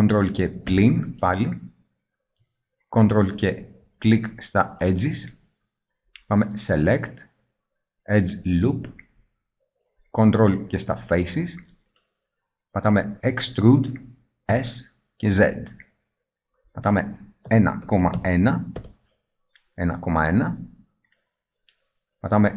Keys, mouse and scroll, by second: 0.8 ctrl+KP_Subtract, 13.5-15.7 middle drag, 13.5 e, 21.4 middle click.